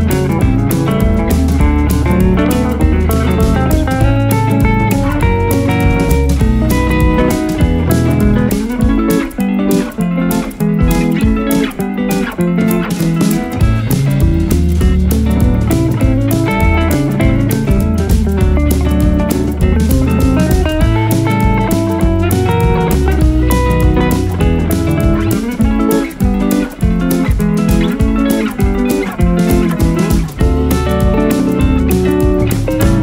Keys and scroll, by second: 8.9 space, 9.3 F2, 14.3 ctrl+q, 24.9 ctrl+z, 27.7 space.